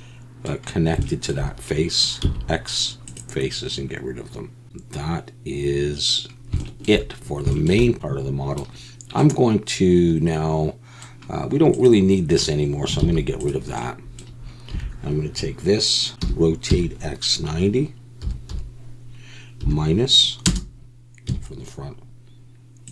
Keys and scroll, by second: 2.2 x, 4.6 Tab, 4.6 alt+a, 13.0 x, 14.7 a, 16.1 Tab, 16.2 r, 16.7 x, 18.2 9, 18.5 0, 19.6 -, 20.5 Return, 21.3 KP_1.